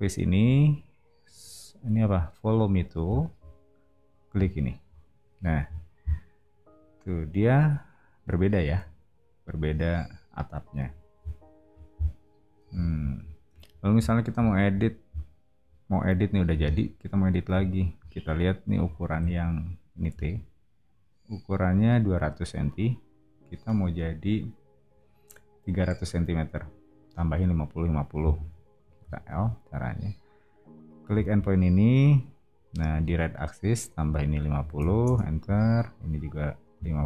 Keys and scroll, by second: 5.6 o, 19.1 t, 29.0 l, 34.3-35.2 typing.